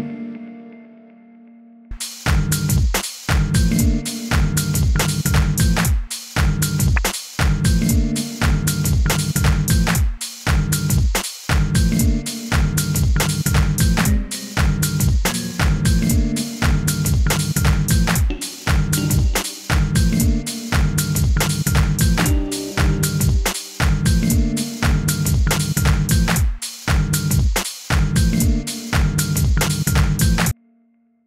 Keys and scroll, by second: 15.2 e, 18.2 j, 18.9 k, 19.4 i, 22.1 k, 30.5 space.